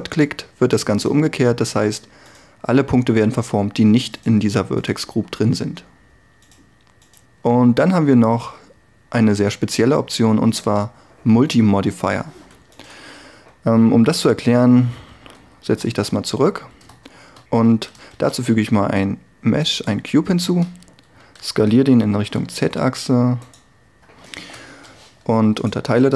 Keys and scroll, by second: 1.7 g, 14.3 a, 15.9 alt+r, 17.1 Tab, 18.1 shift+a, 20.5 Tab, 21.4 s, 22.1 z, 24.5 ctrl+r, 25.1 ctrl+r.